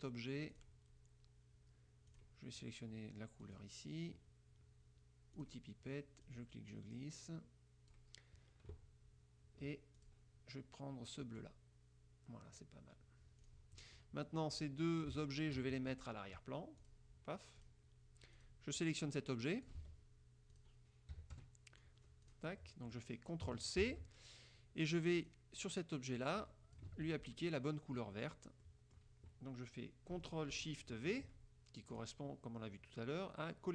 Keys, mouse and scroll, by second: 0.6 click, 2.2 click, 3.6 click, 5.5 click, 6.4-8.2 drag, 10.1 click, 11.3 click, 13.5 click, 14.6 click, 15.3 shift+click, 16.9 click, 17.8 click, 18.5 click, 18.9-20.0 drag, 19.9 ctrl+z, 20.7 click, 21.3 KP_Subtract, 21.5 KP_Add, 22.4 click, 22.8 click, 24.0 ctrl+c, 25.3 click, 26.3-27.2 drag, 27.1 ctrl+z, 28.3 middle click, 28.8 click, 32.0 click.